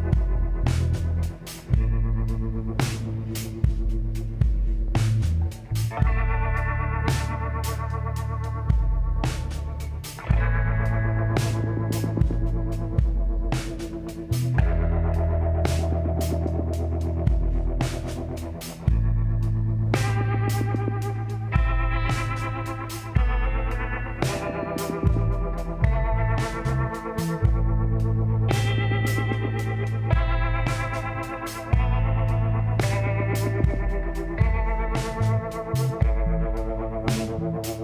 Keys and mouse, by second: 0.5 s, 4.8 ctrl+n, 6.7 click, 7.7 click, 8.5 middle click, 9.0-10.8 drag, 11.3 g, 15.8-17.6 drag, 18.2-24.8 drag, 25.6-28.3 middle drag, 27.4-29.3 drag, 29.3 g, 29.9 click, 31.6-34.4 drag, 34.2 g, 36.9-37.8 drag, 37.6 g.